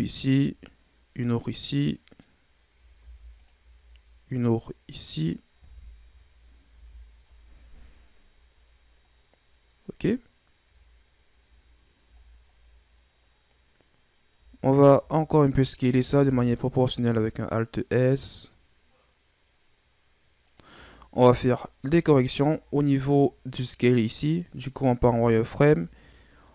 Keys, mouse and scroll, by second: 1.6 scroll down 2, 1.8-3.0 middle drag, 3.0 ctrl+r, 5.6 KP_1, 6.0 Tab, 6.7 a, 10.9 scroll up 2, 11.8-12.5 scroll down 4, 12.5-14.3 scroll up 1, 14.3 Tab, 14.9 a, 15.2 a, 16.1 alt+s, 20.8-21.3 scroll down 5, 21.3-22.0 scroll up 2, 22.1 scroll down 1, 22.8-24.2 scroll up 2, 24.2 right click, 24.9 z, 25.6 right click.